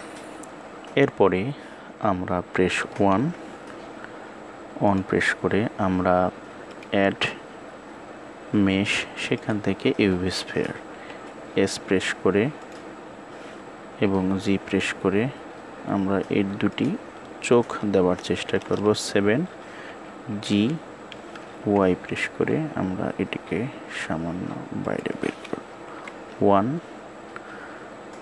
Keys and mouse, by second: 4.9 KP_1, 7.6-9.2 drag, 18.2 KP_7, 19.9 g, 25.7 KP_1.